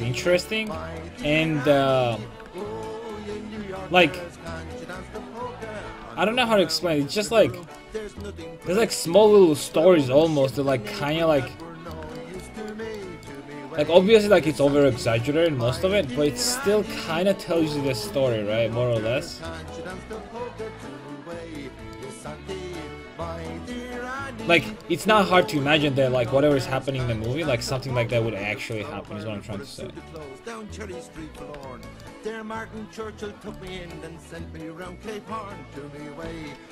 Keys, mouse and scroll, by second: 0.7 right click, 0.7-4.4 drag, 1.2 s, 7.9 a, 11.1 Tab, 17.4-21.7 right drag, 18.9-21.7 drag, 22.0-23.8 middle drag, 25.9 Tab, 27.8 a, 28.1 a, 28.7-30.5 right drag, 31.2 a, 33.4 Tab, 33.6-35.7 drag, 33.7 Tab, 36.3 a.